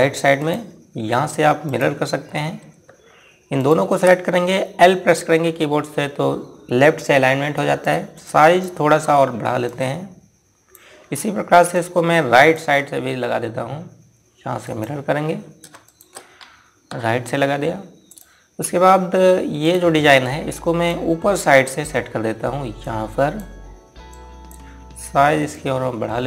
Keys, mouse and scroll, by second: 4.1 click, 6.0 l, 8.3 click, 12.7 ctrl+right click, 15.2 click, 16.4 shift+click, 17.4 r, 18.6 click, 20.3 click, 21.8 scroll up 1, 23.3 click.